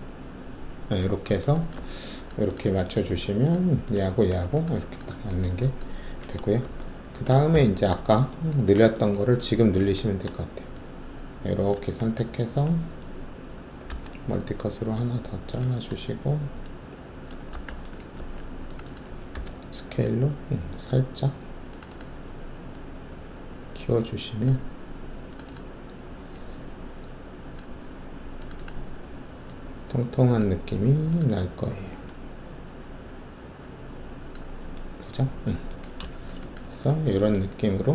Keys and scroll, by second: 1.7 alt+`, 6.6 alt+shift+3, 7.5 alt+f, 8.6 alt+w, 9.8 alt+s, 12.0 shift+w, 13.8 alt+s, 17.5 shift+w, 18.1 alt+2, 19.3 r, 35.2 alt+`, 36.1 alt+shift+q.